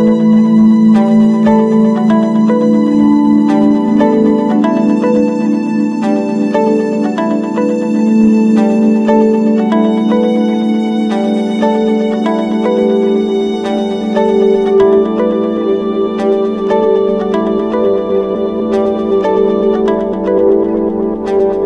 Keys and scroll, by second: 3.1 ctrl+-, 3.5 ctrl+0, 5.0 ctrl+space, 5.3 ctrl+=, 11.9 ctrl+-, 12.1 ctrl+space, 12.6 ctrl+=.